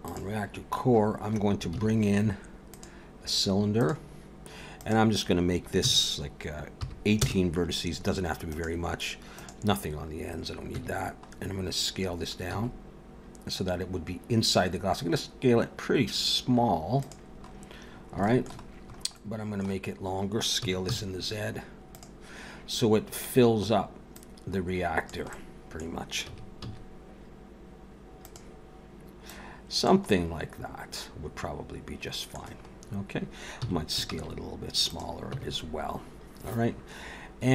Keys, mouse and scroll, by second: 0.1 click, 1.7 shift+a, 4.8 click, 8.5 click, 10.7 Tab, 11.3 scroll up 2, 12.1 scroll down 1, 12.5 s, 17.3-17.8 scroll up 3, 17.8 scroll down 4, 18.2 shift+middle click, 18.8 scroll up 2, 19.1 middle click, 20.6 s, 22.8-23.3 scroll down 2, 24.1 click, 25.3 middle click, 26.3 s, 29.3 click, 30.1 middle click, 32.7 scroll up 2, 33.6 s, 35.3 Tab.